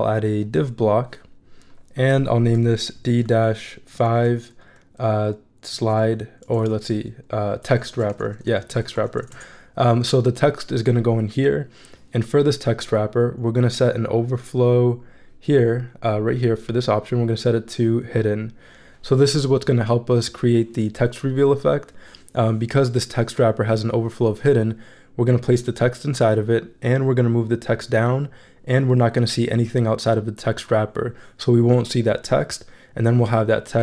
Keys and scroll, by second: 3.0-9.6 typing.